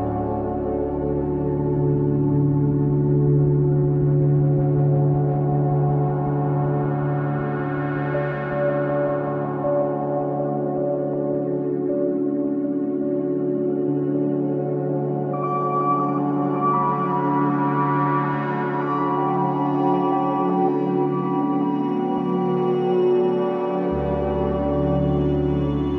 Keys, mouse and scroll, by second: 0.8 click, 6.3-6.7 scroll up 1, 6.7-7.1 drag, 7.1 shift+middle click, 7.7-9.3 drag, 10.9-11.4 scroll up 1, 11.4 Tab, 11.7 click, 12.8 3, 13.3 ctrl+KP_Add, 13.9 click, 15.4 click, 16.0-17.2 drag, 17.2-18.7 scroll up 2, 18.7 ctrl+KP_Add, 19.5 click, 21.1 i, 23.2 KP_1, 23.6 shift+middle click, 23.9 scroll up 2, 24.2 shift+middle click, 25.0 k.